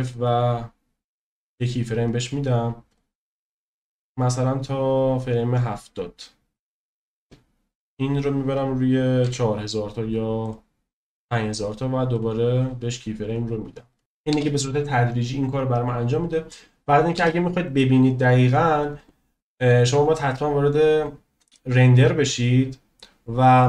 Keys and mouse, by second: 0.0 click, 3.0-7.0 drag, 8.3-10.6 drag, 12.1 click, 13.9 click, 14.3 space, 17.4 space, 17.7-18.6 drag.